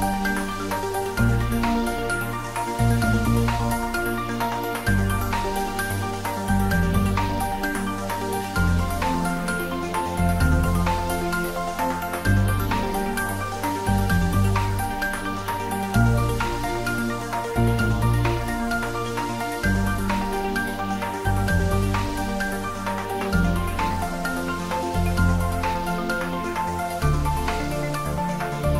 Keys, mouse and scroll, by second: 0.2 click, 0.9 Tab, 1.2-6.2 middle drag, 6.7 shift+a, 8.8 click, 10.3 x, 11.2-11.8 middle click, 12.1 shift+a, 15.0 click, 17.3-18.7 typing, 18.5 click, 20.0-21.1 scroll down 1, 21.8-22.4 middle click, 23.2 click, 24.3-25.6 typing, 25.3 click, 26.6 scroll down 1, 27.7 click.